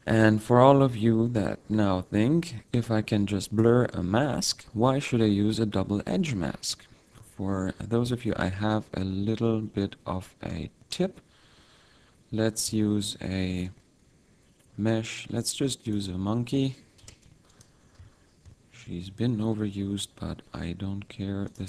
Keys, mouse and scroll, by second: 0.5-1.0 scroll down 1, 1.0-1.5 scroll down 1, 2.9 click, 9.0-10.4 scroll down 7, 10.5 middle click, 11.6 middle click, 12.7 2, 13.8 shift+a, 17.0 r, 18.9 ctrl+2, 19.8 t, 21.5 click.